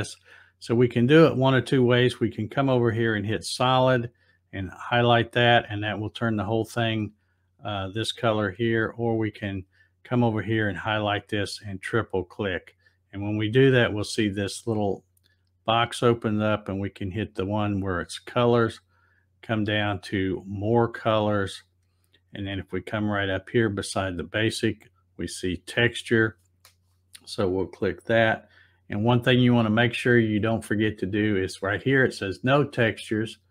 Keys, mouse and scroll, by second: 3.1 click, 9.1 click, 11.6 click, 11.8 click, 12.0 click, 16.8 click, 20.4 click, 26.2 click, 33.3 click.